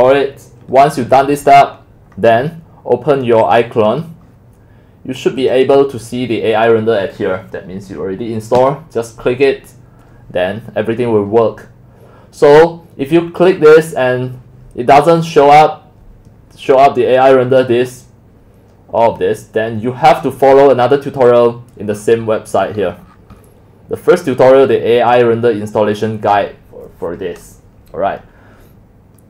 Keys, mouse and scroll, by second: 3.6-5.8 drag, 10.1 click, 20.2 click, 21.0 click, 22.0-22.7 middle drag, 22.0-22.7 scroll up 18, 22.7-23.0 scroll down 20, 23.0-23.4 scroll up 12, 23.4 scroll down 10, 23.6 scroll.